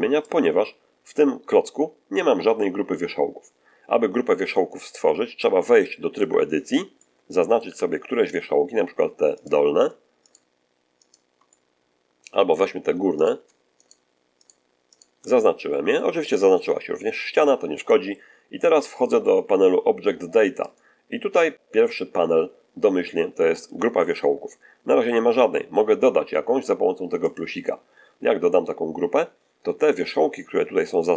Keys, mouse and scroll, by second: 0.2-1.2 drag, 6.1 Tab, 6.9 middle click, 7.6 1, 9.3 right click, 10.2 shift+right click, 10.9 shift+right click, 11.4-12.6 shift+middle drag, 13.1 right click, 13.7 shift+right click, 14.3 shift+right click, 14.9 shift+right click, 15.3 shift+middle click, 20.5 click, 24.8-25.9 middle drag, 27.2 click.